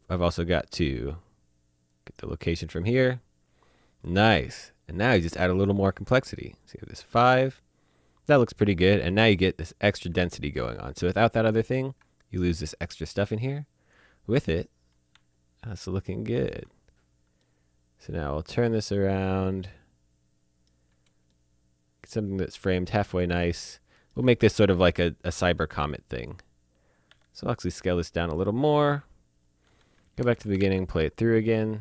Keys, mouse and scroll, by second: 1.9 click, 6.6 click, 10.0 ctrl+Num_Lock, 10.6 ctrl+click, 13.2 click, 15.7 alt+middle click, 17.4 middle click, 20.8 scroll up 1, 21.3 shift+middle click, 22.3-23.1 scroll down 1, 23.3 shift+middle click, 25.2 click, 27.1 s, 28.2 click, 29.9 ctrl+shift+Num_Lock, 30.2-30.5 ctrl+shift+scroll down 2, 30.6 alt+a.